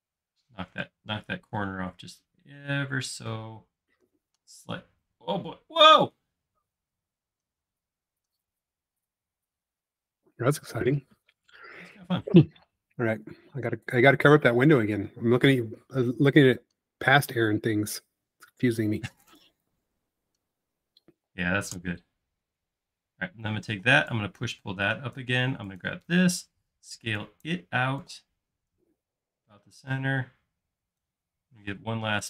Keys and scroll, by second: 13.9 space, 23.7 p, 25.5-26.0 typing, 31.6 p.